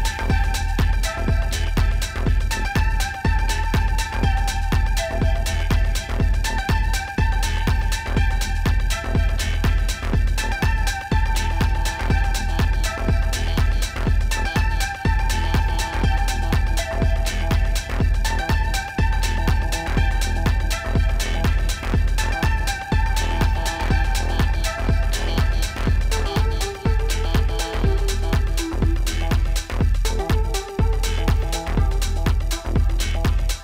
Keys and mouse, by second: 1.9 click, 2.6 click, 3.1 click, 4.6 click, 4.9-6.0 typing, 5.2 alt+click, 7.4 click, 7.7 typing, 10.8 alt+click, 11.1 alt+click, 11.8 click, 12.2 z, 14.1 z, 14.7 ctrl+z, 15.0 alt+click, 16.0 alt+click, 16.3 typing, 16.8 click, 18.1 click, 20.3 click, 22.6 click, 30.0 space, 30.1 click, 30.8 ctrl+=, 32.8 click.